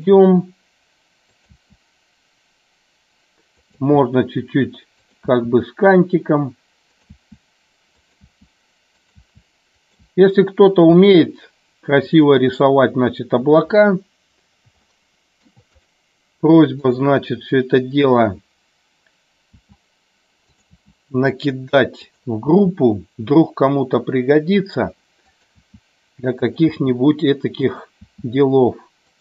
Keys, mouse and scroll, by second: 0.3 e, 1.4 click, 1.5 e, 3.6 click, 3.7 e, 5.0 click, 5.2 e, 7.0 click, 7.1 e, 8.0 click, 8.3 e, 9.0 click, 9.2 e, 9.7 click, 10.1 e, 10.6 click, 11.0 e, 14.9 shift+middle click, 15.7 click, 16.9 click, 19.6 e, 20.5 click, 20.9 e, 22.1 click, 25.5 e, 26.5 click, 26.6 e, 27.6 click.